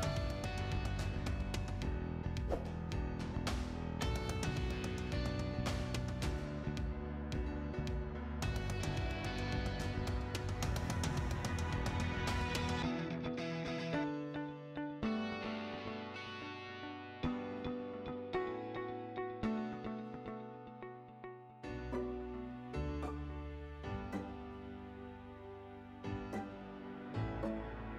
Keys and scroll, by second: 14.8-16.1 typing, 22.0 Return, 24.0-24.9 typing, 26.2 Escape, 27.0 Escape.